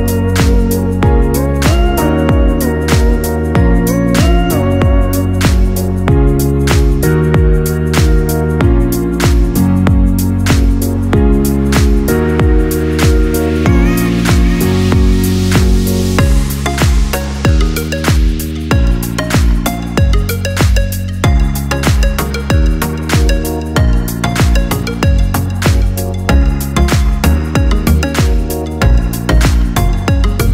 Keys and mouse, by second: 0.1 click, 1.8 shift+click, 2.8-5.8 right drag, 5.8-8.9 drag, 9.1 click, 11.2 click, 12.2 shift+click, 13.0-15.9 right drag, 15.9-23.2 drag, 24.6 shift+click, 26.0 j, 27.8 ctrl+z, 30.0 shift+click.